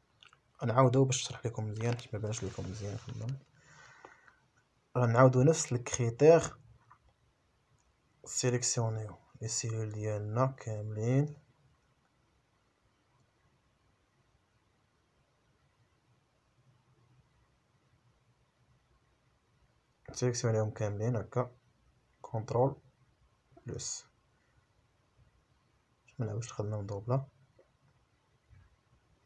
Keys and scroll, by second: 0.1 shift+a, 7.8 a, 8.7 Return, 10.3 Up, 11.5 ctrl+z.